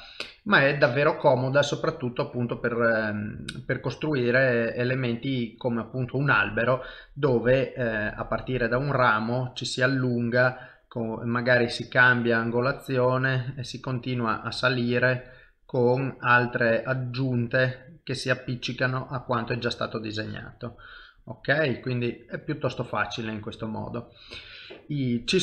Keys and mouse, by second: 0.8 shift+middle click, 1.6 ctrl+middle click, 2.0 shift+middle click, 2.9 middle click, 4.0 ctrl+middle click, 5.2 middle click, 5.8 shift+middle click, 7.4 middle click, 10.3 middle click, 11.9 click, 12.6 click, 13.2 middle click, 14.5 click, 15.6 click, 18.0 middle click, 20.0 click, 21.5 middle click, 22.8 shift+middle click, 23.3 middle click, 24.0 shift+middle click, 25.0 click.